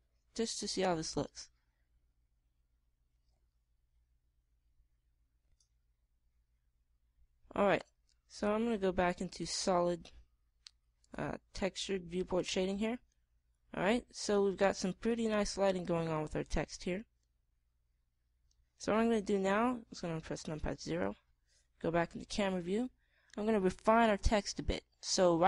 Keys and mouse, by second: 10.4 click, 11.9 click, 13.9 middle click, 17.6-18.9 middle drag, 19.8 middle click, 21.3 KP_0.